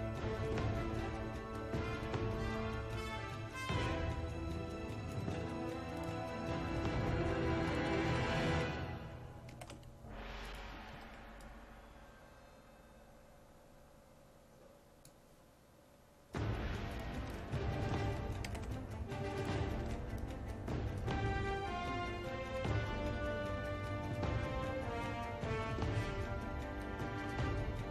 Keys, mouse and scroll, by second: 8.1 ctrl+a, 9.6 c, 10.5 click, 11.0 ctrl+v, 11.4-15.4 drag, 17.2 ctrl+a, 18.5 c, 19.4 click, 19.8 ctrl+v, 20.2-21.5 drag, 22.2-27.9 drag.